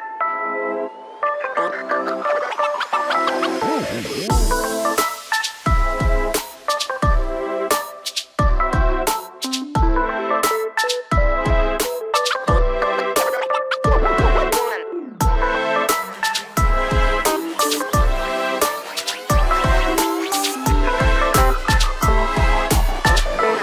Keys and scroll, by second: 3.2 shift+x, 6.9 space, 7.8 e, 12.5 shift+space, 16.3 s, 21.9 shift+space.